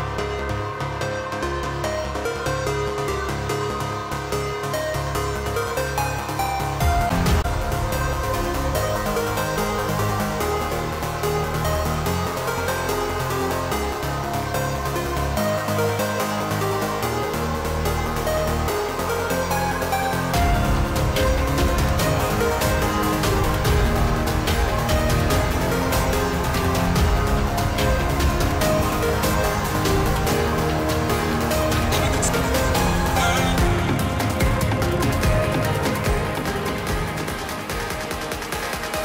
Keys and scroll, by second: 5.6 ctrl+z.